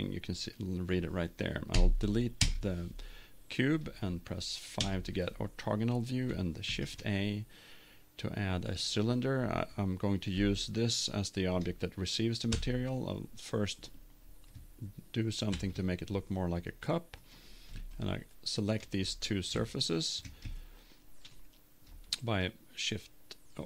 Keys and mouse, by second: 1.7 Delete, 4.8 KP_5, 6.6 shift+a, 10.4 middle click, 12.6 Tab, 13.1-15.1 drag, 15.5 ctrl+Tab, 17.2-19.1 drag, 19.1 middle click, 19.8-21.7 right drag, 20.6 click, 21.7 middle click.